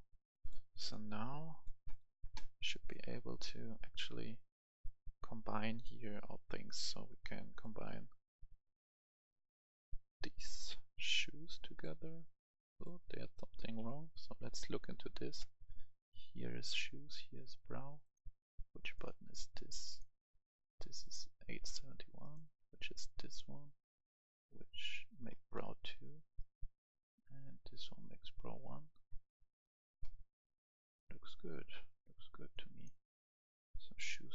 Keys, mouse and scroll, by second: 13.8 Escape, 14.8 right click, 18.0-23.7 drag, 25.3 right click, 29.0-29.6 scroll down 1, 29.6-30.7 right drag, 31.3 scroll up 1, 32.5 click, 33.1-33.6 scroll up 1, 34.1-34.3 right drag.